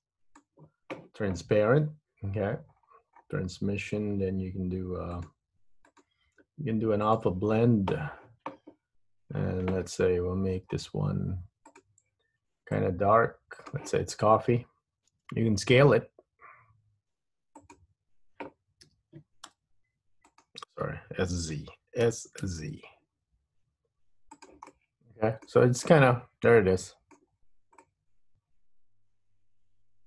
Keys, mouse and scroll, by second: 2.5-4.5 scroll down 17, 5.3 click, 6.0 click, 10.1-11.0 scroll up 12, 11.9 click, 15.3 s, 19.1 s, 22.1 s, 24.8 middle click, 25.7 Tab, 26.0 middle click, 27.5-28.6 scroll up 2, 28.6 middle click.